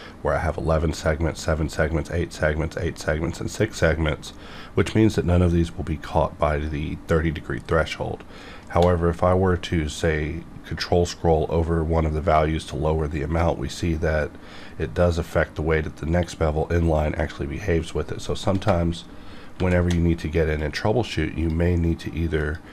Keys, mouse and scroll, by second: 9.3 ctrl+scroll down 2, 10.0-10.9 ctrl+scroll down 2, 10.9-11.3 ctrl+scroll up 2, 11.3-13.2 ctrl+scroll down 4, 18.6 shift+Num_Lock, 18.7-19.5 ctrl+scroll down 1, 19.5 ctrl+shift+b, 20.6-22.4 drag.